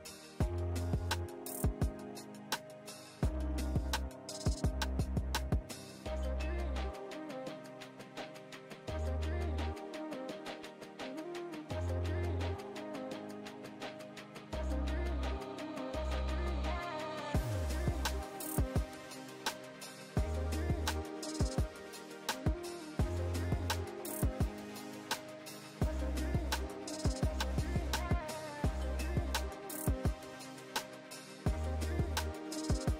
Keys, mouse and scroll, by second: 3.5 click, 5.0 ctrl+shift+g, 6.0-6.5 drag, 8.4 shift+click, 9.4-9.9 click, 10.5 ctrl+g, 11.3 click, 12.7-13.5 click, 13.5 ctrl+space, 13.5-13.9 ctrl+click, 13.7 ctrl+space, 14.7-15.4 drag, 17.9 ctrl+space, 18.1-18.4 ctrl+click, 18.1 ctrl+space, 18.9-19.4 click, 19.6 space, 19.8-20.7 click, 19.9 space, 20.5 space, 20.9-21.5 click, 21.8 ctrl+space, 21.9 ctrl+click, 22.1 ctrl+space, 22.3-22.7 click, 23.1 click, 24.6 click, 25.0 ctrl+a, 25.6-26.9 typing, 28.8 Down, 29.3-30.9 typing, 32.6 click.